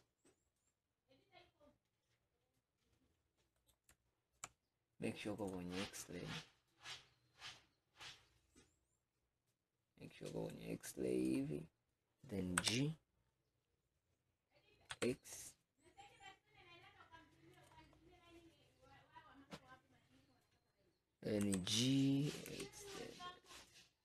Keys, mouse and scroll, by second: 5.5-7.1 drag, 10.6 click, 12.7 g, 18.0-19.0 scroll down 9, 19.2-20.6 scroll up 8, 21.5 g.